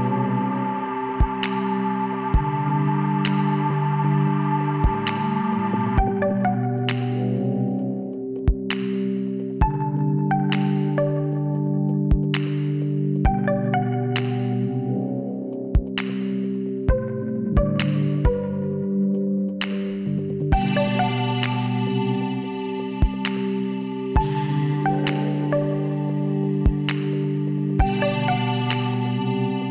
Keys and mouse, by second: 1.1 z, 2.9 click, 3.7 l, 5.2 ctrl+n, 8.1-11.8 drag, 8.9 l, 12.7-13.8 middle drag, 13.8-16.0 drag, 16.7-18.4 middle drag, 18.7 click, 19.3-22.2 middle drag, 20.2-23.5 drag, 26.0-27.3 drag, 26.6 l, 27.3 KP_7, 28.0 middle click, 29.0 shift+d.